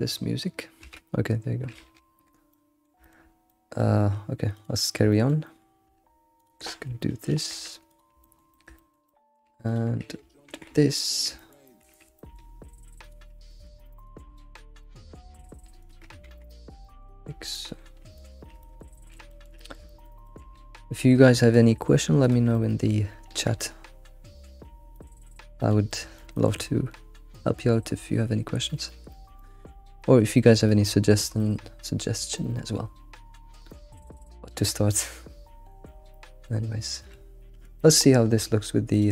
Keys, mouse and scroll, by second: 2.5-4.5 middle drag, 4.1 alt+shift+g, 4.5 alt+shift+click, 4.8-6.4 shift+middle drag, 6.4 ctrl+click, 7.3 alt+shift+g, 7.9 click, 8.2-9.7 shift+middle drag, 9.7 ctrl+click, 10.5 alt+shift+g, 11.1 click, 11.4-12.5 shift+middle drag, 12.2 click, 12.5 scroll up 3, 13.0 ctrl+click, 13.5 alt+shift+g, 14.0 shift+click, 14.4-15.8 shift+middle drag, 15.8 ctrl+click, 16.3 alt+shift+g, 16.5-18.1 middle drag, 18.1 click, 18.4 scroll down 2, 18.6-20.5 shift+middle drag, 20.5-20.9 scroll up 2, 20.9-21.6 middle drag, 21.6-22.2 scroll up 2, 22.2 ctrl+click, 22.5-23.3 middle drag, 23.6-24.1 shift+middle drag, 23.7 alt+shift+g, 24.3 middle click, 25.6 alt+middle click, 25.9-27.1 middle drag, 27.1 scroll down 1, 27.3-28.9 middle drag, 28.9 scroll down 1, 29.1-32.7 shift+middle drag, 32.7-33.7 scroll down 8, 33.7-37.5 shift+middle drag, 37.5 Tab, 37.8-38.9 middle drag, 38.9 click.